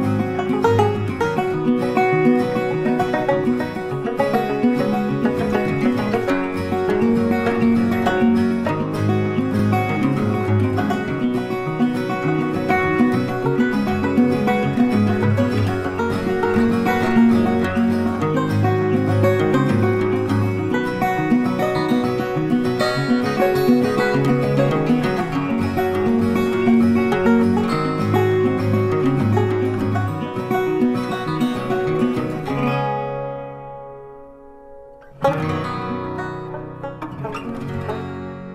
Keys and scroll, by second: 5.8 Delete, 10.1 ctrl+t, 26.9 ctrl+t.